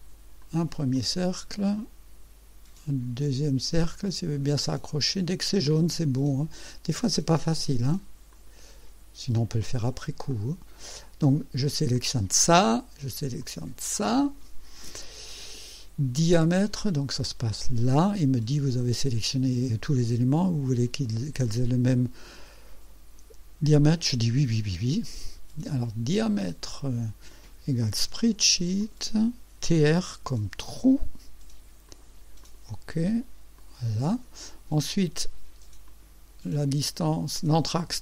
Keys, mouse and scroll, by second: 0.4 click, 1.0 click, 8.3 click, 9.6 click, 10.3 right click, 11.9 click, 13.4 click, 16.6 click, 17.5 click, 23.8 click, 26.6 click, 28.0 s, 28.8 click, 30.1 t, 30.4 r, 31.9 click, 32.4 click, 33.6 click, 35.9 click, 37.5 click.